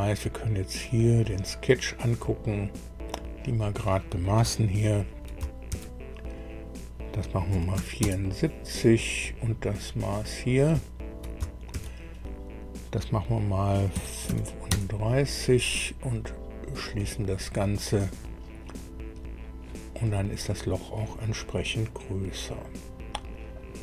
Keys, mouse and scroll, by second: 0.8 click, 2.3 scroll up 2, 3.3 click, 5.6 shift+d, 7.4 KP_7, 7.7 KP_4, 8.0 KP_Enter, 10.2 click, 11.6 shift+d, 13.9 KP_3, 14.2 KP_5, 14.6 KP_Enter, 16.6 click, 20.1-23.7 drag.